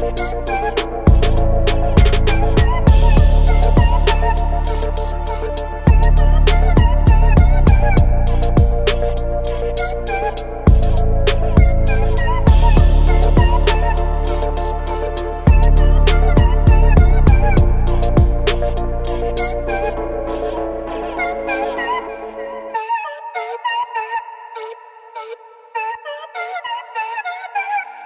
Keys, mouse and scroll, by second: 4.3 g, 7.7 click, 9.0 shift+a, 11.8 shift+a, 12.9 g, 13.4 z, 16.1-16.5 middle drag, 17.6 middle click, 18.5-19.2 s, 19.1 click, 19.5 s, 20.4 click, 21.4-22.8 drag, 23.8-25.2 drag, 25.0 KP_0, 26.8-28.0 drag.